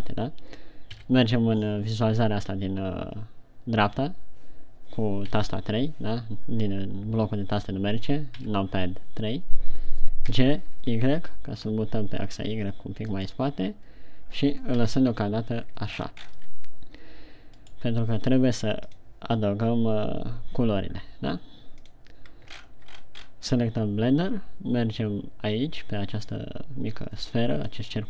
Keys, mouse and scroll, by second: 1.3 KP_3, 5.6 KP_3, 8.8 KP_3, 10.7 g, 13.7 click, 15.1 KP_1, 16.5-16.8 shift+scroll up 7, 18.0 right click, 23.0-23.3 shift+scroll up 6, 23.7-24.6 scroll up 4.